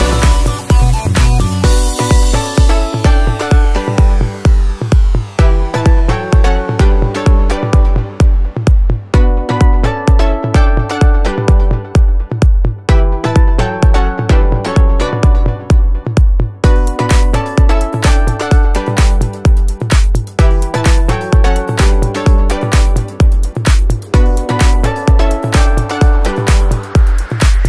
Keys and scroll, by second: 19.0 ctrl+a, 25.4 ctrl+a.